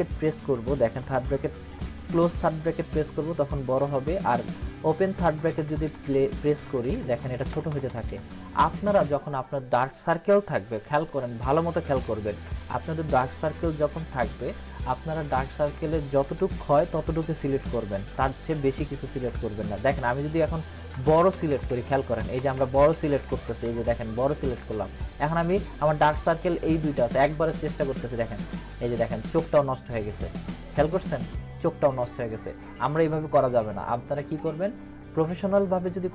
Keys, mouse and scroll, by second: 0.0-2.7 typing, 5.2-8.0 typing, 17.4 [, 17.6 [, 17.8 [, 18.0 [, 20.9-23.1 typing, 28.2 click, 33.6 click, 34.1 ctrl+z.